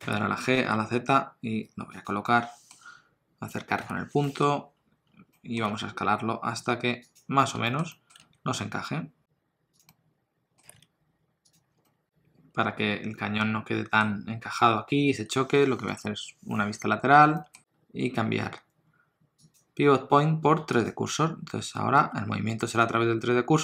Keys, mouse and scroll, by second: 0.0 g, 2.3 middle click, 3.8 KP_Decimal, 4.2 middle click, 4.5-5.3 scroll down 5, 5.4 middle click, 5.7 s, 7.4 scroll down 2, 7.7 shift+middle click, 8.0 middle click, 8.2 s, 9.9 middle click, 10.6 g, 11.7 scroll down 2, 11.8 middle click, 15.9 KP_3, 17.4 shift+middle click, 17.6 click, 19.5 click, 22.0 r.